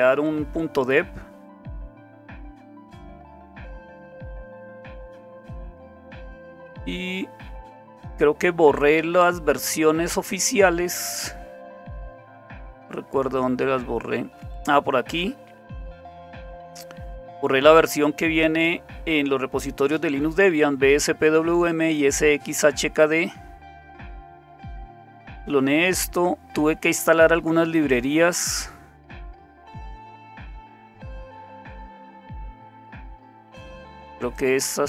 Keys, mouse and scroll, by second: 1.4-2.6 scroll down 1, 2.6-4.8 scroll down 1, 4.8-6.1 scroll down 1, 6.1-6.6 scroll up 3, 8.8-11.8 scroll up 2, 11.8 scroll up 1, 12.5-13.0 scroll up 2, 13.0-14.3 scroll up 1, 14.3-15.1 scroll up 1, 16.4-18.5 drag, 18.9 click, 23.1-24.5 scroll down 2, 24.5-25.4 scroll down 1, 25.4-27.0 scroll down 1, 27.0-30.0 scroll up 5, 30.0-31.6 scroll up 1, 31.6-34.3 scroll up 1, 34.3-34.8 drag.